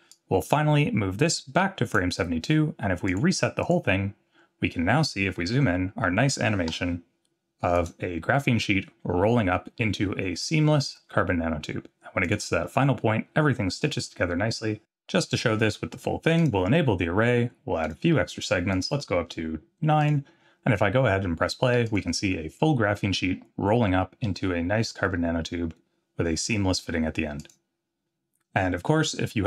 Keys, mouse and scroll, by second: 0.1-1.9 drag, 3.1 click, 3.6 click, 4.3-5.0 scroll up 3, 6.7 n, 7.7 click, 12.2 click, 12.6-13.0 scroll up 4, 13.9 scroll down 1, 16.4 click, 17.8 click, 18.7 click, 18.9 click, 20.0 click, 21.9 click, 27.5 click.